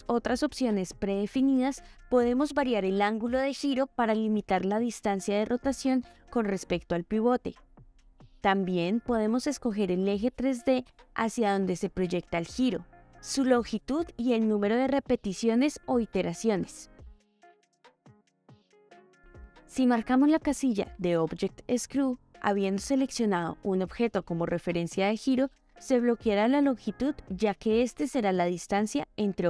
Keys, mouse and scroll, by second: 1.9-7.4 drag, 8.3 click, 9.6 click, 11.0 click, 12.7-13.2 middle drag, 13.9-15.6 drag, 16.5 click, 16.9 click, 17.2 shift+middle drag, 18.5 click, 21.1-22.7 middle drag, 24.1 click, 26.6 click, 26.8-27.2 shift+middle drag, 28.1 middle click, 28.5 g.